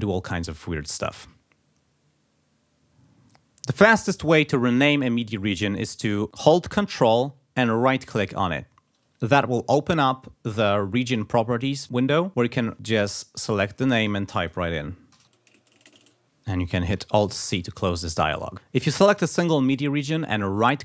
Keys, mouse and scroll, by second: 8.1 ctrl+right click, 12.7 a, 13.4 click, 14.9-16.6 typing, 17.2 alt+c, 20.6 right click.